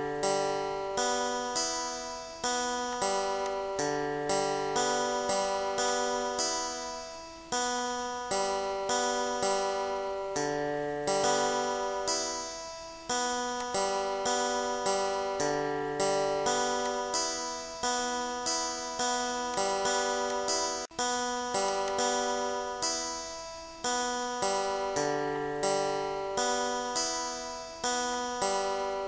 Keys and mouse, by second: 1.8 click, 3.0 click, 5.9 click, 7.8 click, 9.7 click, 13.6 click, 15.1 click, 16.9 click, 17.4 ctrl+z, 19.6 right click, 20.3 click, 21.7 click, 23.4 click, 24.7 click, 25.4 click, 27.1 click, 28.2 click.